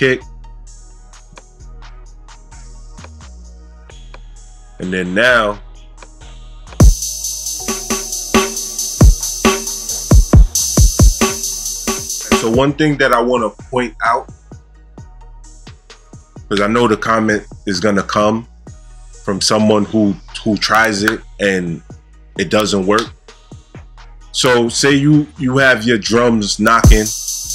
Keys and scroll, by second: 6.7 space, 26.7 space.